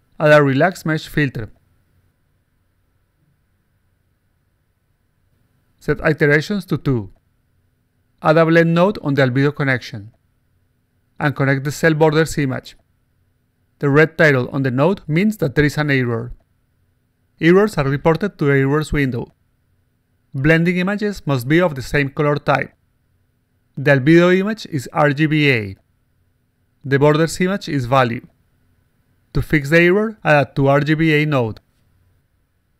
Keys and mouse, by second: 0.0 click, 1.6 click, 1.8 click, 3.5 click, 4.2 click, 4.7 click, 5.5 click, 7.0 click, 8.7 click, 9.4-10.2 drag, 11.0 click, 11.7 click, 17.4 click, 19.5 click, 21.2 click, 23.2 click, 24.2-25.6 drag, 28.7 click, 30.6-31.6 drag, 32.0 click.